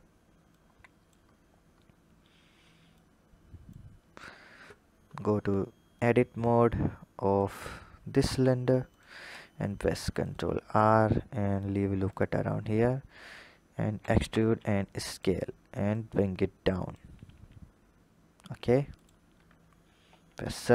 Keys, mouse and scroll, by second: 0.3 click, 1.2-2.8 scroll up 6, 2.8-3.8 drag, 3.8-5.8 scroll up 8, 5.8-7.2 drag, 8.1 Tab, 8.7 click, 9.6 ctrl+r, 12.5-12.8 scroll up 2, 13.8 e, 15.7 click, 17.2 s, 19.8 KP_7, 20.5-20.7 scroll down 11.